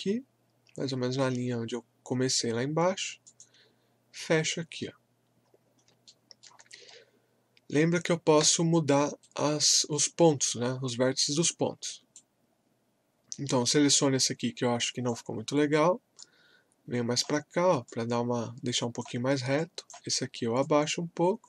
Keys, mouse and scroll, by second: 3.2 click, 5.2 scroll up 1, 6.0 alt+middle click, 6.7-7.1 scroll up 1, 8.4 w, 9.2-14.7 right drag, 14.8-21.4 drag.